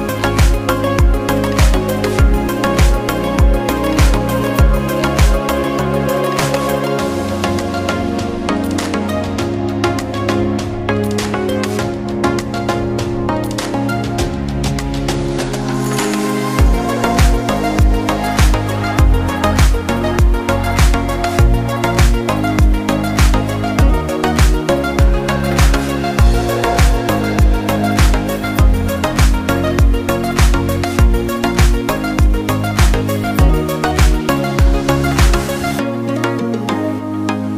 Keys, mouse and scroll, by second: 1.6-2.1 scroll up 2, 2.1 click, 3.4 shift+click, 4.0 shift+click, 4.5 shift+click, 4.8 shift+click, 5.4 shift+click, 5.6 shift+click, 5.9 shift+click, 6.0 scroll down 2, 6.2 scroll up 1, 6.6 click, 6.9-7.2 scroll up 2, 7.2 shift+click, 7.4 scroll down 2, 8.4 click, 9.2 e, 10.0 Tab, 10.4 scroll down 2, 10.5 scroll up 1, 10.8 Tab, 10.9 Tab, 11.2-12.5 drag, 13.0-13.3 scroll down 1, 13.3 click, 13.9 scroll up 3, 14.1 Tab, 14.5 shift+click, 15.0 shift+click, 15.2 scroll down 2, 15.4 click, 15.7-16.1 scroll up 1, 16.1 typing, 18.0 click, 18.4 click, 18.7 scroll up 1, 19.3 typing, 20.7 e, 21.5 Tab, 21.6 scroll down 1, 21.8 scroll up 1, 22.3 click, 22.5 Tab, 23.0 ctrl+r, 24.2 ctrl+r, 26.1 ctrl+r, 27.8 ctrl+r, 28.9 ctrl+r, 30.4 3, 30.5 click, 30.6 shift+click, 30.8 shift+click, 30.9 shift+click, 31.1 shift+click, 31.3-31.6 scroll up 1, 31.7 i, 33.5 scroll up 1, 33.7 click, 34.0-34.4 scroll up 3, 34.4 click, 34.6 shift+click, 35.0 shift+click, 35.6 shift+click, 35.9 shift+click, 36.1 shift+click, 36.4 shift+click, 36.5 shift+click, 37.0 shift+click, 37.1 shift+click, 37.4 shift+click.